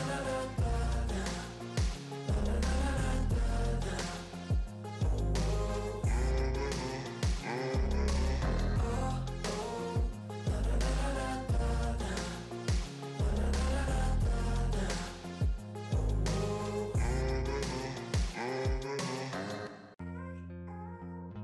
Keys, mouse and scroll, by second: 0.6 ctrl+s, 0.8-4.1 drag, 4.1 shift+,, 4.4 Return, 5.7 click, 5.8-7.2 typing, 7.2 ctrl+s, 10.6 ctrl+s, 10.6 click, 12.5 Return, 13.9 click, 14.1-18.1 typing, 17.5 Return, 19.3 click.